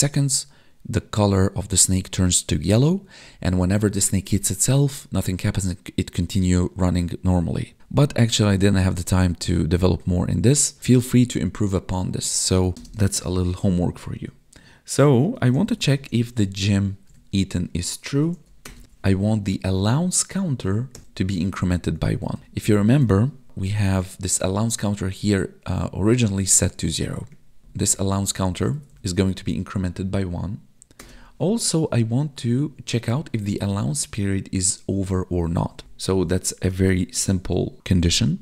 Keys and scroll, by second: 12.7 space, 16.6 Tab, 17.1 Right, 19.4 Tab, 21.5 ctrl+s, 22.2 Left, 23.4 ctrl+d, 27.3 Escape, 27.6 ctrl+Down, 28.7 Right, 36.7 space.